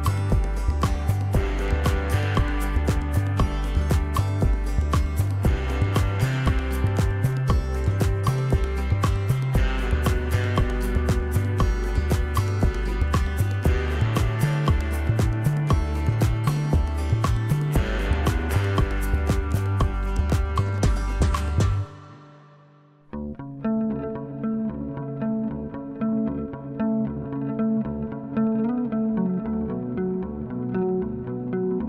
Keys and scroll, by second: 5.3 ctrl+d, 6.6 ctrl+-, 6.8 ctrl+-, 15.6 ctrl+j, 17.0 ctrl+=, 19.2 p, 20.0 0, 22.5 =, 22.8 =, 24.8 ctrl+=, 28.1 ctrl+z, 28.6 ctrl+=, 30.4 ctrl+z.